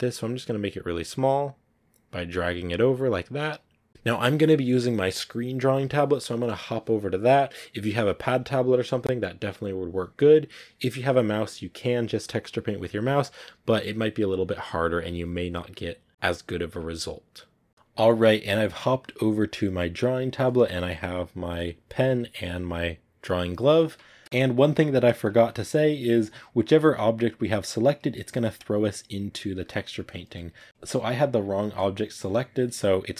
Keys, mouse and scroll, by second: 3.8-30.7 middle drag, 30.7 ctrl+z, 31.9-33.1 drag.